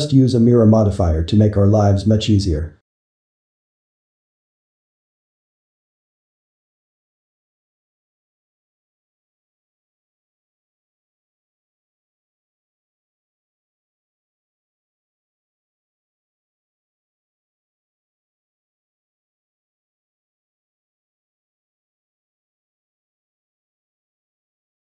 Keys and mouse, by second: 2.2 z, 2.8-5.6 ctrl+middle drag, 5.6 click, 6.3 click, 6.9 shift+click, 7.4 2, 8.7 shift+click, 9.2 2, 9.5 click, 10.1 shift+click, 10.6 2, 13.4-15.8 shift+middle drag, 15.8 click, 16.2 2, 19.7-21.4 middle drag, 21.4 `, 22.0 z, 22.4 shift+middle click, 22.8 click, 24.0 ctrl+middle click, 24.7 x.